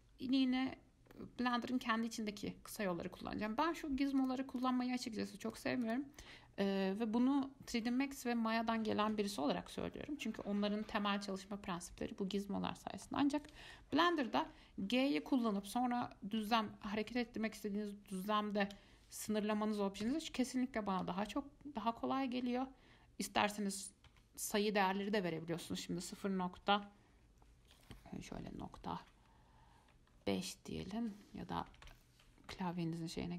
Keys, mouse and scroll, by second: 2.9 click, 4.4 click, 4.8 click, 5.7 click, 6.0 click, 13.2-14.6 middle drag, 14.6 g.